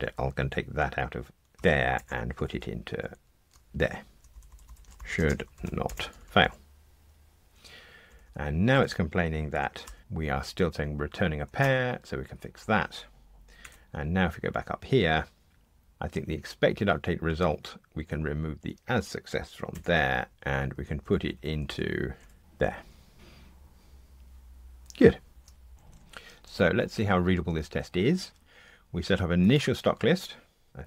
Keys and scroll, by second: 1.5 super+x, 3.7 super+v, 13.6 F2, 20.3 super+z, 23.1 ctrl+r.